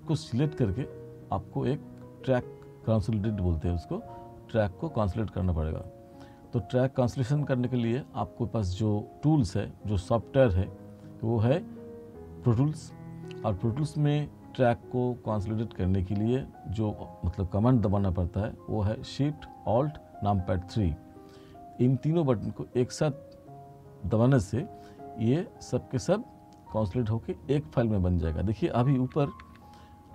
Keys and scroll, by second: 29.2 t.